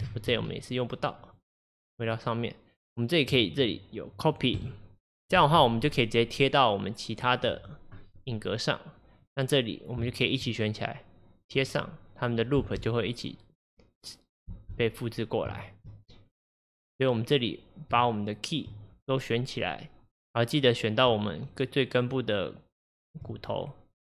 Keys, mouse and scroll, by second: 2.1 click, 4.6-7.9 drag, 9.3-12.6 drag, 12.6 space, 14.6 space, 15.2 scroll up 1, 15.6 shift+middle click, 16.1-16.7 scroll up 1, 16.7 click, 18.2-24.0 shift+drag.